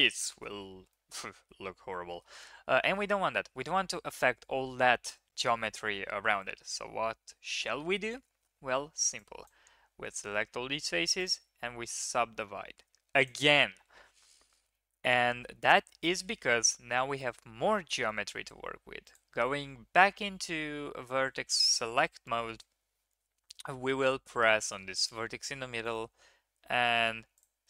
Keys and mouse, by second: 0.2 shift+drag, 0.9-2.2 middle drag, 2.5 ctrl+z, 2.9 ctrl+z, 3.8 ctrl+z, 4.4 ctrl+z, 4.9 ctrl+z, 5.2 ctrl+z, 5.5 ctrl+z, 5.9 ctrl+z, 8.4 3, 9.1-9.4 drag, 11.3 click, 18.4 1, 19.0 click, 21.2 ctrl+KP_3.